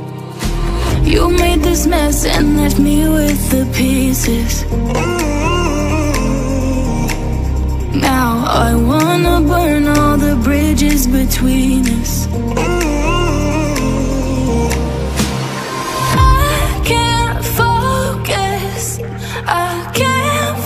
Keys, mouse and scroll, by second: 3.4 click, 17.3 click.